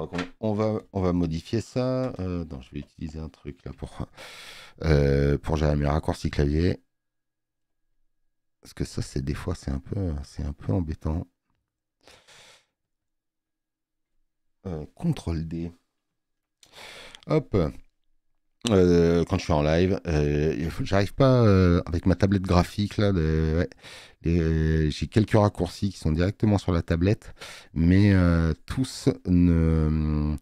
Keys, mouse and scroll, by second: 5.1 click, 10.1-11.9 drag, 12.8 click, 16.5 ctrl+d.